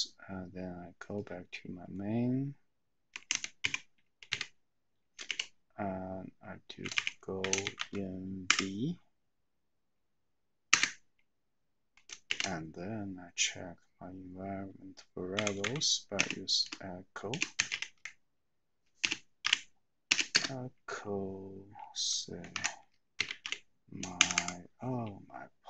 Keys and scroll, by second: 3.3-5.3 typing, 7.2-8.2 typing, 8.5 Tab, 10.9 Return, 15.4-16.2 typing, 17.3-20.1 typing, 22.6-24.0 typing, 24.2 Tab, 24.3 Tab.